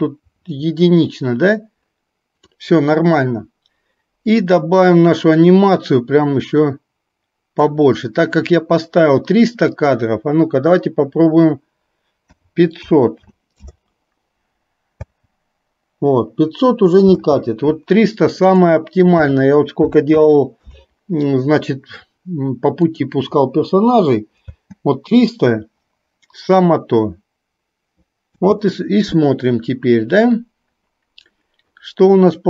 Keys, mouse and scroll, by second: 4.6-7.8 drag, 9.8-13.7 drag, 15.1 space, 17.2 space, 18.7-20.8 drag, 23.1 drag, 24.4 space, 28.4 space.